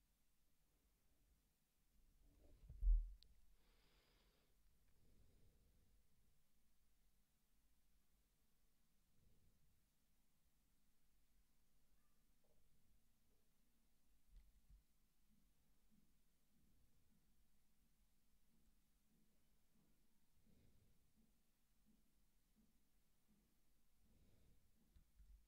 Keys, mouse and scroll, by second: 24.8-25.4 scroll down 1.